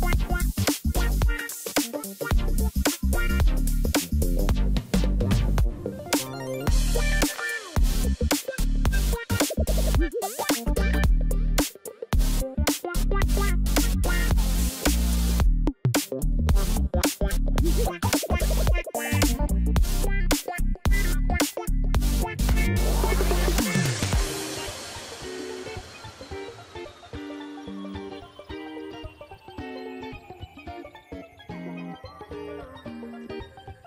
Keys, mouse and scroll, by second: 2.2 ctrl+z, 6.6 shift+click, 12.6-14.0 scroll up 3, 14.2 ctrl+-, 23.1 shift+click, 23.7 right click, 27.6 right click.